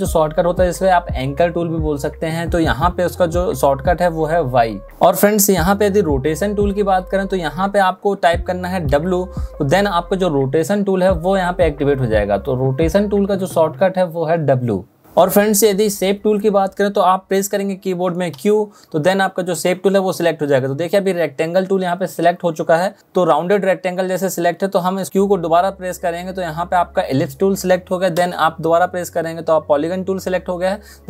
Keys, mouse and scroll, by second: 3.7 v, 8.5 w, 14.0 w, 18.1 q, 25.1 q, 28.6 q.